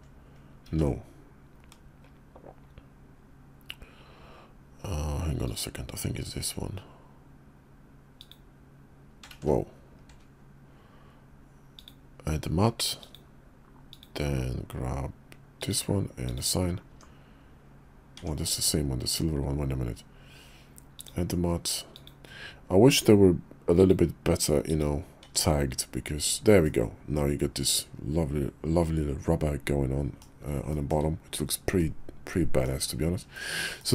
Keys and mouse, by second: 0.9 ctrl+z, 5.4 click, 9.5 ctrl+z, 11.7 click, 13.0 drag, 13.9-15.7 drag, 16.2 click, 16.9 Tab, 18.2 Tab, 20.9 drag, 21.9-24.0 drag, 24.6 click, 25.2 Tab, 26.6-30.2 middle drag, 30.7 shift+middle click, 31.8-32.6 middle drag, 33.3 shift+middle click, 33.8-33.9 middle drag.